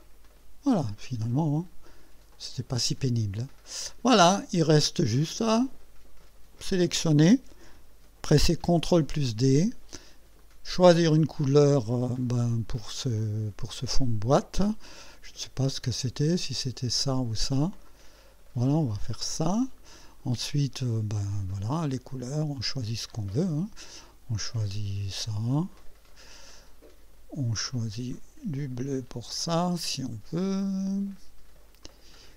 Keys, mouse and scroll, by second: 0.3 click, 1.0 click, 2.0 click, 2.7-4.7 drag, 5.1 right click, 6.7 click, 8.8 ctrl+d, 10.4 click, 17.9 click, 19.1 click, 19.6 click, 21.3 click, 22.6 click, 24.7 click, 25.7 click, 28.1 click, 29.3 click, 30.6 click, 31.8 click.